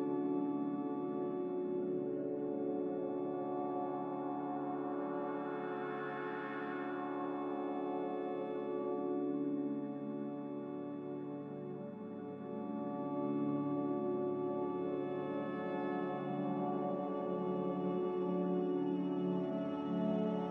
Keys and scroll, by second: 3.6 g, 5.6 z, 8.7-10.7 typing, 11.3 Return, 13.8 s, 17.4-17.7 typing, 19.4 Tab.